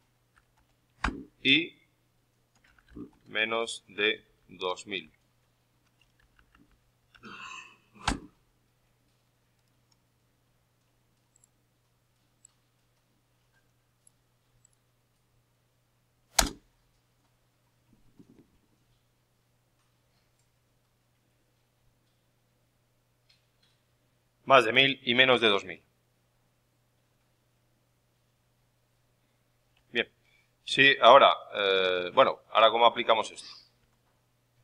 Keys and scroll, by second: 0.9 shift+y, 6.1 ctrl+Left, 7.1 shift+Right, 8.0 ctrl+shift+n, 29.6 alt+Tab, 30.6 alt+Tab, 33.7 alt+Tab.